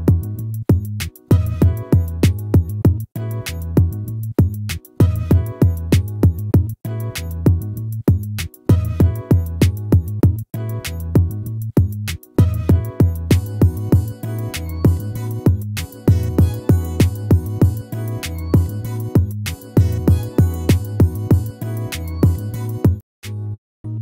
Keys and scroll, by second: 1.2 ctrl+-, 2.2 ctrl++, 17.6 ctrl+z.